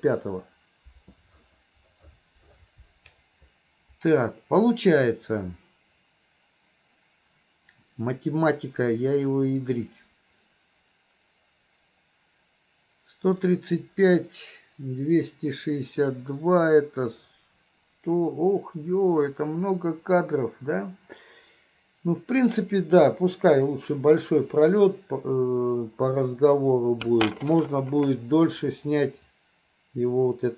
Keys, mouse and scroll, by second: 29.4-30.5 drag.